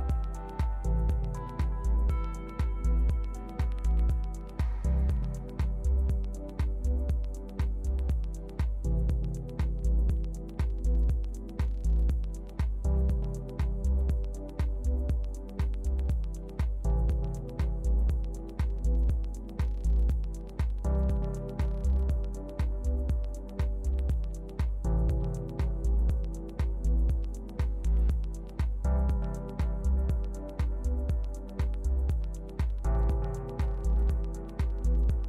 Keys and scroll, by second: 2.1 super+v.